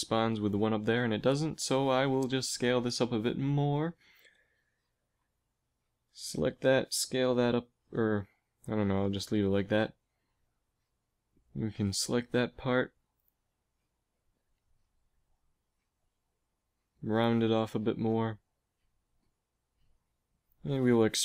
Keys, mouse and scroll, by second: 0.7 ctrl+z, 2.3 s, 5.9 click, 6.3 s, 6.6-7.6 right drag, 9.2 a, 10.3 right click, 11.1 right click, 15.3 s, 16.1 s, 19.0 KP_1, 21.0 e.